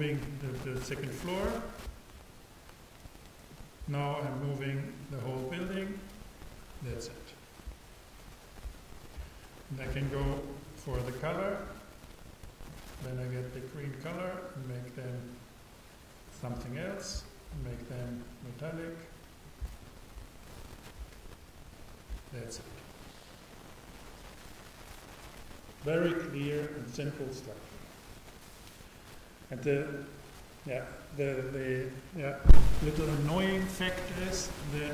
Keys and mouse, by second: 3.6-7.3 drag, 10.6-12.2 super+right drag, 12.7-14.3 super+drag, 18.5-20.1 drag.